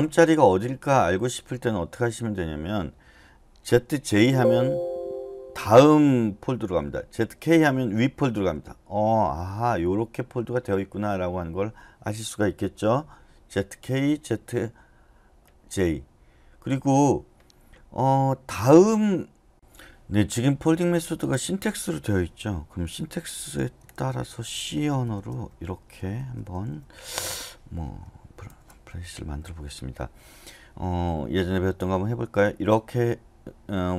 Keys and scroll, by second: 3.9 typing, 7.2-10.5 typing, 19.5 BackSpace, 23.6 typing, 24.8-28.9 typing, 29.2 Escape.